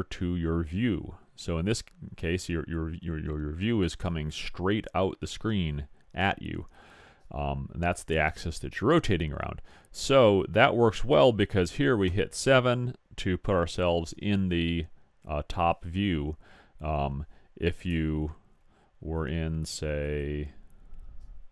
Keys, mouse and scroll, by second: 20.1 click, 20.5 middle click, 20.9 click, 20.9-21.5 middle drag.